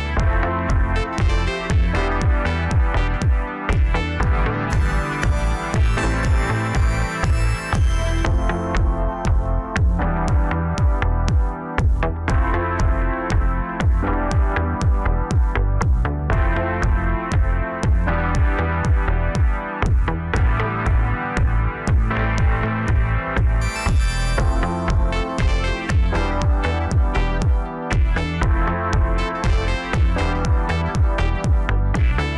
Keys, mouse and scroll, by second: 1.0 g, 3.5-6.0 drag, 6.0 g, 8.2 KP_0, 15.4 KP_0, 16.5-17.2 middle drag, 17.2 scroll up 2, 17.6-18.8 middle drag, 18.8 click, 19.2-20.0 scroll up 5, 20.0-23.0 middle drag, 24.6-25.7 scroll down 1, 25.9 KP_0, 27.5 click, 29.1 click.